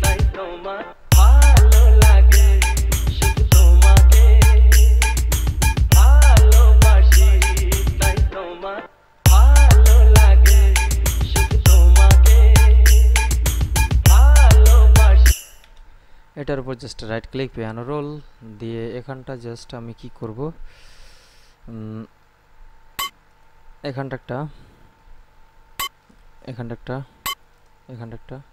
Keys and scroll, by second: 1.0 space, 9.2 space, 15.6 space.